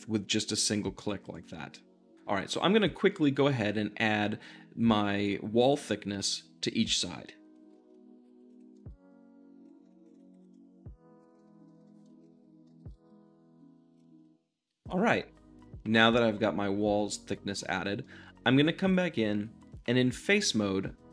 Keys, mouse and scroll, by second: 1.0 q, 1.3-2.4 drag, 7.7 e, 8.2 middle click, 8.3 q, 8.4 click, 8.7 e, 8.7 middle click, 9.7 shift+middle click, 10.0 alt+click, 10.2 middle click, 10.4 e, 10.5 middle click, 11.1 shift+click, 11.3 shift+middle click, 12.2 alt+click, 12.3 middle click, 12.8 e, 14.1 middle click, 15.9-16.9 shift+middle drag, 17.0-19.3 shift+middle drag, 19.3 3, 19.6-21.1 drag.